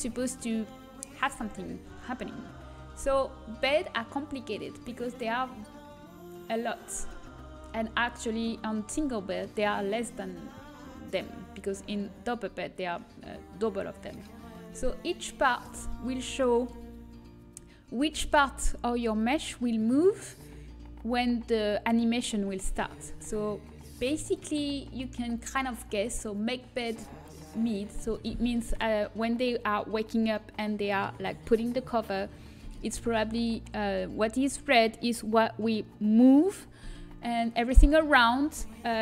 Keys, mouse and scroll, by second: 3.9-7.9 drag, 8.4-10.5 middle drag, 14.9-16.6 drag, 16.6 middle click, 24.3-26.1 drag.